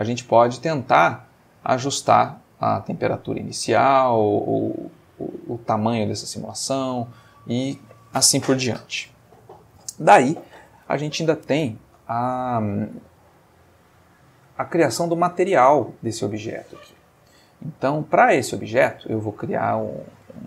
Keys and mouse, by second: 0.4 middle click, 4.9 middle click, 6.3 middle click, 7.2 middle click, 13.1-17.5 middle drag, 19.4 click.